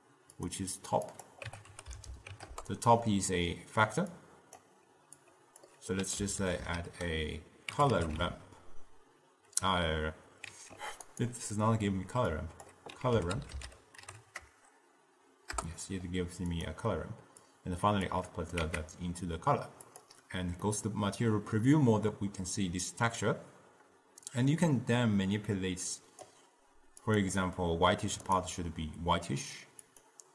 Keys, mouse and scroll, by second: 1.2-8.4 drag, 12.5-14.1 drag, 14.1 r, 17.6-18.7 drag, 18.7 z, 20.9-23.8 middle drag, 24.4-27.3 drag, 30.0-30.3 drag.